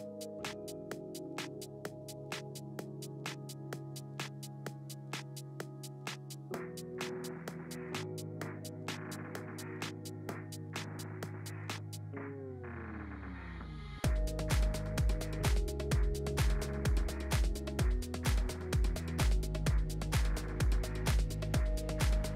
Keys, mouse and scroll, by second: 4.5 shift+d, 6.8 ctrl+z, 7.0 ctrl+z, 8.6-15.2 drag, 17.2 shift+d, 20.1 click, 20.6 ctrl+z, 21.1 click, 21.7 click, 22.1 click.